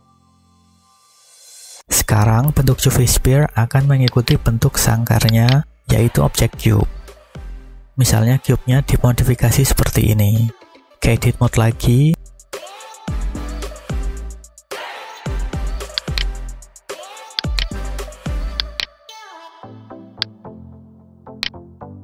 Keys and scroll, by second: 11.4 Tab, 12.7 a, 13.9 1, 19.2 b.